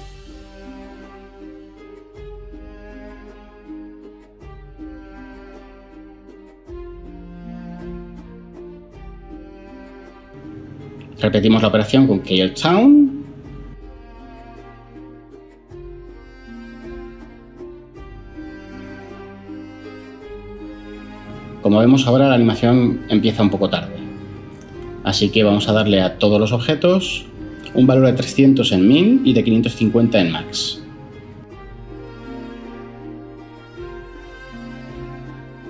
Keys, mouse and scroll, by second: 0.7-1.6 typing, 1.0 Return, 3.5-5.9 typing, 8.9 Tab, 11.5 Tab, 14.2-16.2 typing, 16.4 Return, 24.1 Tab, 28.5-28.9 typing, 30.8-31.4 typing, 33.1 Tab, 34.7 Tab.